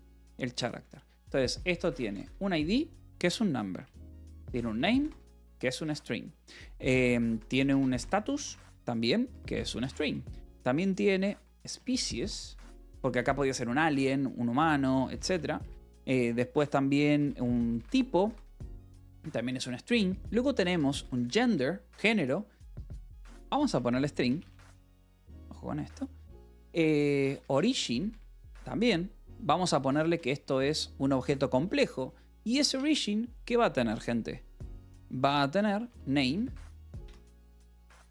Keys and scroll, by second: 0.7 Tab, 1.0-2.7 typing, 3.6 Return, 3.9-6.0 typing, 7.0-15.8 typing, 17.0-24.3 typing, 24.7 Escape, 25.5 o, 26.9-28.0 typing, 30.3 Return, 35.9-38.1 typing.